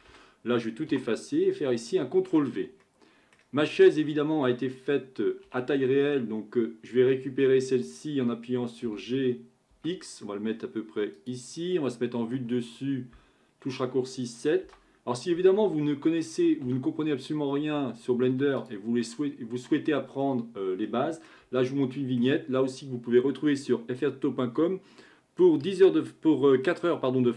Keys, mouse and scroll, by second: 0.1 a, 0.9 Delete, 2.2 ctrl+v, 2.8-3.7 middle drag, 3.7-5.3 scroll up 7, 5.5 m, 8.9 g, 12.4 KP_7, 14.6 g, 19.0-20.2 middle drag, 20.2-20.9 scroll up 3, 20.9-24.7 middle drag.